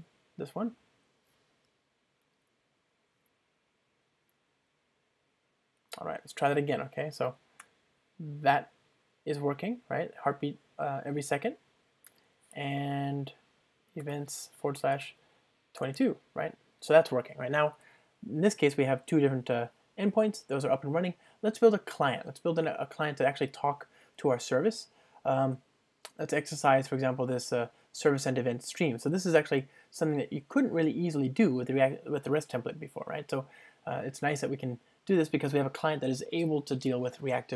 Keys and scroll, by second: 29.1 super+1.